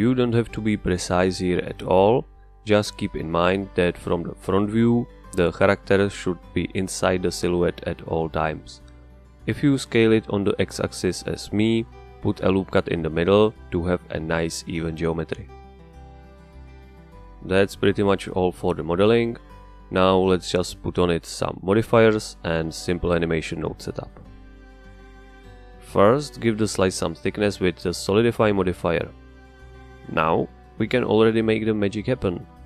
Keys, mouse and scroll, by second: 0.1 KP_1, 1.2 g, 6.7 click, 8.9 s, 11.5 ctrl+click, 13.0-14.6 middle drag, 14.6 ctrl+r, 15.8 right click, 17.2 middle click, 18.1-20.3 scroll down 1, 20.3-21.3 scroll up 1, 21.3 Tab, 25.4 click, 26.6-28.1 drag, 28.5-29.5 drag, 29.5 Return, 31.3 click, 31.9-32.6 drag.